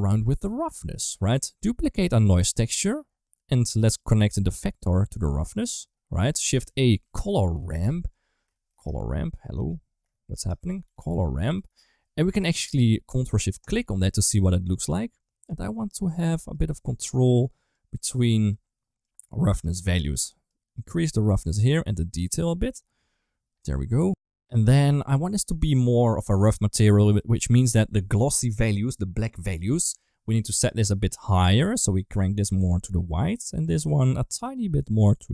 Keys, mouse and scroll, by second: 0.3 click, 0.7 g, 1.8 click, 2.1 shift+d, 3.3 middle click, 4.4 click, 4.6-5.3 drag, 6.5 shift+a, 7.5 r, 8.6 shift+s, 10.2 shift+a, 13.5 ctrl+shift+click, 14.9 click, 16.4 click, 17.6 click, 18.9 click, 19.8 middle click, 20.3 click, 21.5-23.5 drag, 25.4 right click, 26.9 click, 30.5 click, 33.8 click.